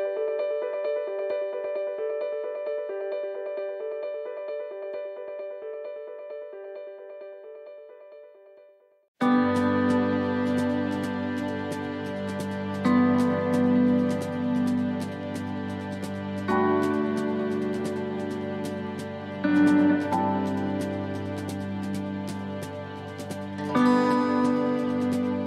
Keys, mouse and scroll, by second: 1.6 middle click, 2.3 shift+middle click, 3.8 s, 12.1 middle click, 13.0-13.3 scroll up 1, 13.6 shift+middle click, 14.0-14.8 scroll up 2, 16.6 s, 23.3 middle click, 24.3 shift+middle click.